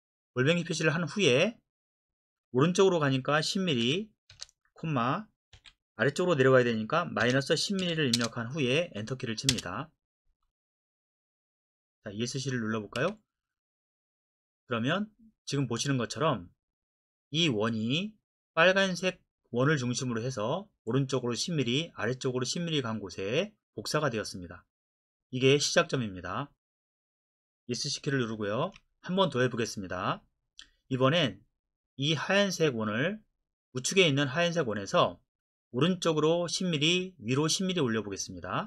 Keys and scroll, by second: 3.8 KP_1, 4.3 KP_0, 5.5 ,, 7.2 KP_Subtract, 7.8 KP_1, 8.2 KP_0, 9.5 Return, 13.0 Escape, 28.6 Escape.